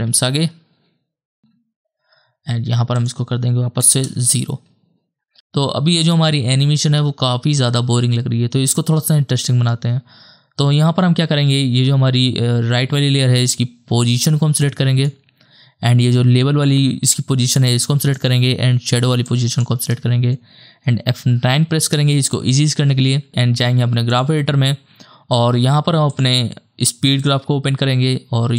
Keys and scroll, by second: 0.1 ctrl+Right, 4.0 KP_0, 5.8 KP_0, 6.1 KP_0, 8.9 space, 21.7 F9.